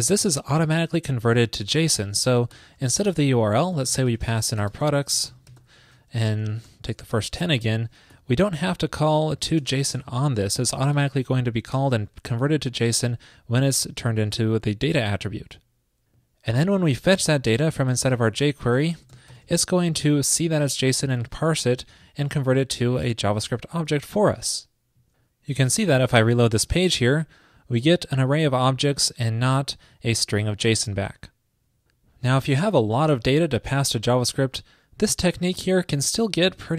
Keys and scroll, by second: 1.8 alt+shift+Left, 1.9 alt+shift+Left, 2.7 alt+shift+Left, 10.7 alt+shift+Left, 13.3 super+s, 18.3 alt+shift+Left, 24.1 super+s.